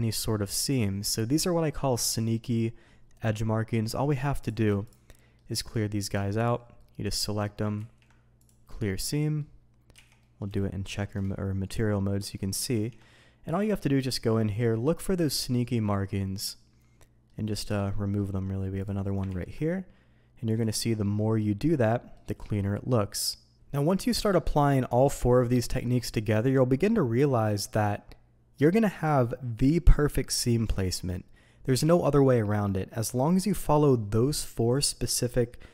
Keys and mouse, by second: 5.1 shift+drag, 6.3 shift+click, 6.7-7.3 shift+drag, 7.7 ctrl+e, 8.9-9.4 middle drag, 9.9 z, 10.2 drag, 10.6 shift+middle drag, 12.2 click, 12.7 ctrl+e, 14.2 middle click, 15.5 shift+middle drag, 15.8-17.2 middle drag, 17.7-18.1 shift+middle drag, 19.2 ctrl+e, 21.9 middle drag.